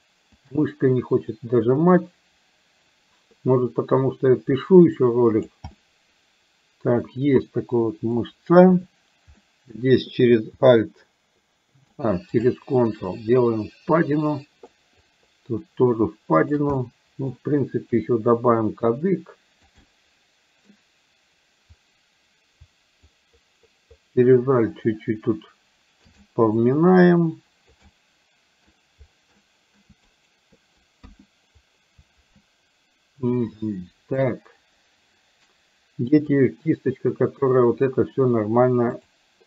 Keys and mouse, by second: 0.4 click, 1.7-5.7 drag, 5.8-7.0 middle drag, 7.4 middle click, 9.4 middle click, 12.5-14.7 ctrl+drag, 15.2-16.7 ctrl+drag, 16.8 middle click, 17.9-19.8 drag, 19.9 middle click, 23.2-26.0 ctrl+drag, 26.2 middle click, 27.0 click, 27.9 middle click, 29.4 middle click, 30.3 shift+right click, 31.2 KP_1, 33.7 middle click, 39.0 click.